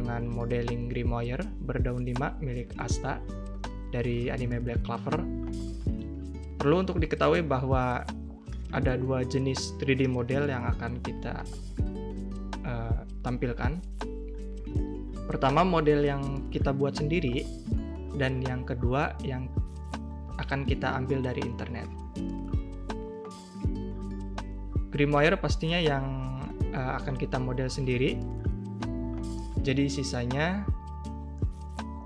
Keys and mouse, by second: 0.1 g, 1.3 middle click, 1.5 ctrl+b, 3.2 Tab, 3.2 middle click, 3.6 Tab, 3.8 middle click, 3.9 a, 3.9 a, 4.0 shift+click, 4.3 click, 4.4 3, 4.8 click, 5.2 middle click, 5.4 middle click, 5.5 shift+middle click, 5.6 middle click, 5.8 shift+middle click, 6.0 middle click, 7.7 middle click, 8.2 middle click, 8.9-9.5 drag, 9.7 middle click, 10.1 e, 11.2 middle click, 11.6 s, 11.9 click, 12.0 Tab, 12.0 drag, 12.2 a, 12.2 a, 12.2-12.6 drag, 13.0 click, 13.8 drag, 14.6 click, 15.8 click, 16.0 shift+right click, 16.9-18.0 right drag, 18.2 right click, 19.0 right click, 19.7 middle drag, 19.9 ctrl+a, 20.2 drag, 20.8 click, 21.2 middle drag, 22.1 click, 22.3 middle click, 22.7 click, 23.1 click, 23.4 click, 23.7-24.2 middle drag, 25.1 click, 25.7 Tab, 25.8 a, 25.9 a, 26.0 2, 26.3 alt+shift+click, 26.5 click, 27.0 middle click, 27.3 middle click, 28.0 middle click, 29.0 click, 29.9 a, 29.9 a, 29.9 middle click, 30.6 click, 30.9 click, 31.1 alt+shift+click, 31.3 middle drag, 31.9 middle click.